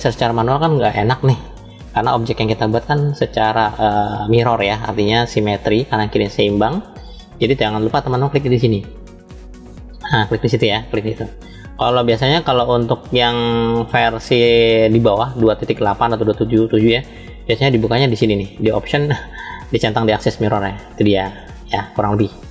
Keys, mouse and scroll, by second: 1.7 middle click, 4.8-5.8 shift+middle drag, 9.1 click, 10.9 click, 16.6 click, 19.0-22.5 drag.